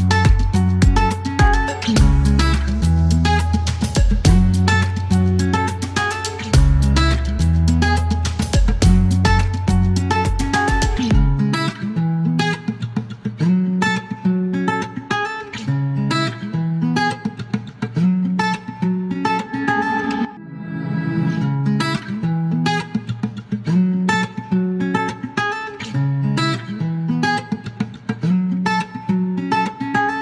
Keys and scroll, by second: 13.6 typing, 15.2 KP_Decimal, 15.3 KP_1, 15.4 KP_3, 15.5 Return, 16.3 alt+q.